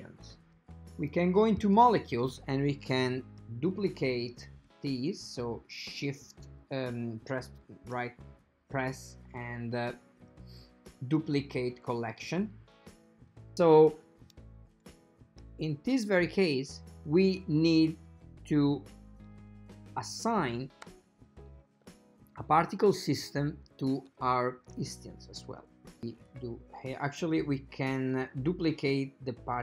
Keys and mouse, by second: 1.2-1.9 drag, 4.5 shift+d, 7.7-12.4 right drag, 12.4 click, 16.5 click, 20.5-22.8 ctrl+middle drag, 22.9 shift+middle click, 23.3 shift+middle click, 26.3 click, 28.0 click, 29.5 click.